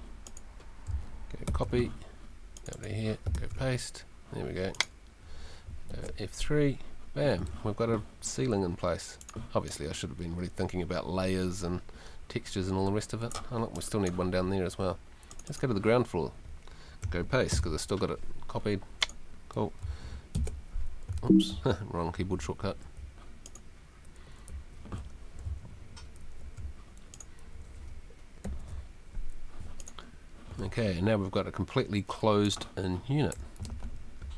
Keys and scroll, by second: 1.5 super+c, 3.3 super+v, 5.9 F3, 17.5 super+v, 21.2 super+3, 22.6 Escape, 24.5 Escape, 25.4 super+Escape, 28.4 F3, 33.3 w.